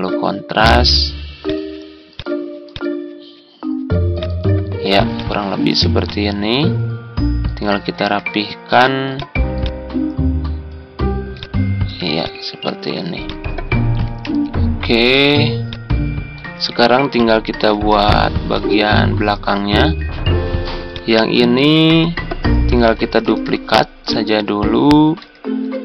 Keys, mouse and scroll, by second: 13.9 Tab, 23.1 ctrl+d.